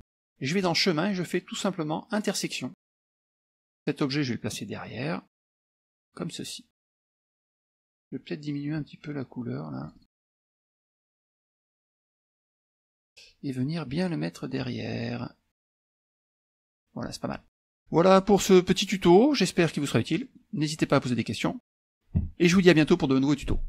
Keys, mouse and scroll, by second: 0.7 click, 2.8 click, 4.9-6.0 drag, 6.8 click, 9.9 click, 11.0-13.1 drag, 13.3 click, 15.0 click, 15.8-16.8 drag, 17.7 KP_Subtract, 18.2-18.5 scroll up 1, 18.7-19.2 scroll up 1, 19.2-19.9 scroll down 1, 19.9-20.8 scroll up 1, 21.1 middle click, 22.2 KP_Add.